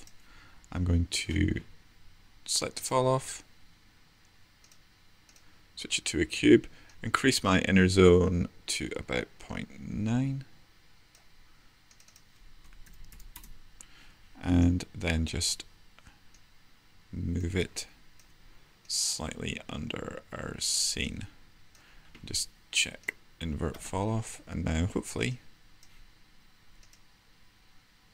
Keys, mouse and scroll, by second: 16.8 w.